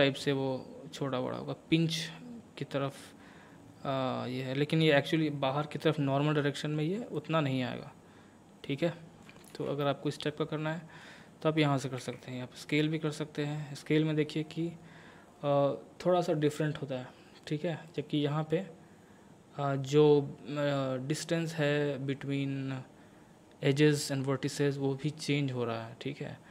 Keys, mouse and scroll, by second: 5.8-7.2 middle drag, 7.2-9.5 drag, 9.5 ctrl+z, 9.8-12.0 middle drag, 12.0 s, 17.9 right click, 18.5-26.5 drag.